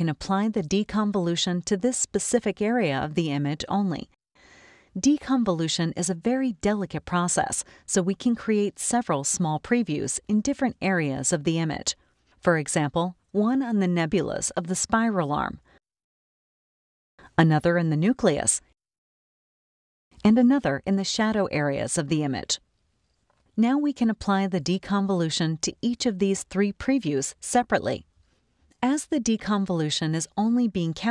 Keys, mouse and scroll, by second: 1.8-3.7 drag, 9.9 click, 12.1 click, 14.2 scroll up 2, 14.2-15.7 drag, 17.0 click, 18.0-19.2 drag, 20.2 click, 21.9-23.2 drag, 25.2 click, 29.2 scroll up 1, 29.3 click.